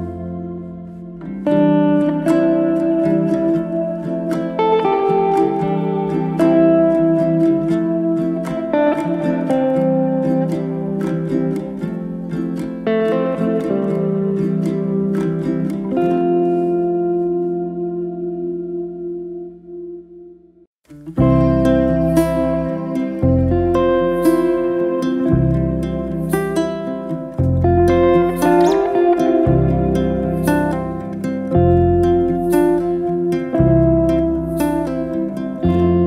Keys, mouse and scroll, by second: 0.4 2, 0.8 click, 1.3-2.1 middle drag, 2.1 click, 2.3 middle click, 3.2 g, 4.3 g, 4.5-4.8 middle drag, 4.8-5.2 scroll down 4, 5.2-5.8 middle drag, 5.8 KP_7, 6.2-6.6 scroll down 3, 6.6-7.2 shift+middle drag, 7.2 Tab, 7.6-8.3 drag, 8.7 click, 9.7 click, 10.9 click, 11.8 click, 12.3 middle click, 13.3 ctrl+click, 13.9-14.5 middle drag, 14.5 ctrl+click, 14.9-15.9 middle drag, 15.9 ctrl+z, 16.0 middle click, 16.7 ctrl+click, 17.2-18.0 middle drag, 18.0 KP_7, 18.5-18.9 scroll up 2, 18.9-19.9 shift+middle drag, 19.9 alt+d, 21.4-22.7 middle drag, 22.7 KP_1, 23.2-23.5 scroll up 1, 23.5-24.3 shift+middle drag, 24.3 g, 27.2 r, 31.0 z, 31.3 middle click, 31.9 s, 34.1-35.6 middle drag.